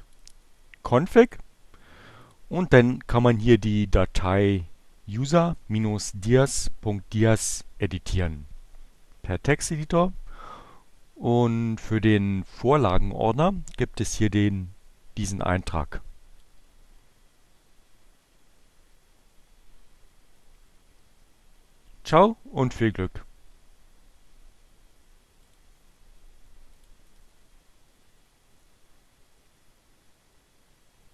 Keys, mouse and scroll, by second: 1.9 click, 6.6 right click, 9.5 click, 14.5-16.7 drag, 24.4 click, 27.1 click.